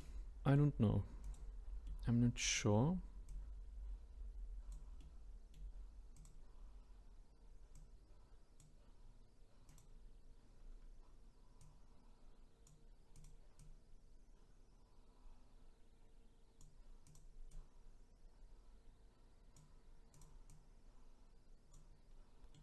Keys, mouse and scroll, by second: 1.2 click, 1.9-3.3 middle drag, 3.3 click, 5.0-6.1 middle drag, 6.1 click, 7.7 click, 9.7 click, 10.5-11.6 scroll up 4, 11.6 click, 13.1 click, 13.6 click, 17.0 click, 17.5 click, 20.1 click, 22.1-22.5 scroll down 5, 22.5-22.6 middle drag.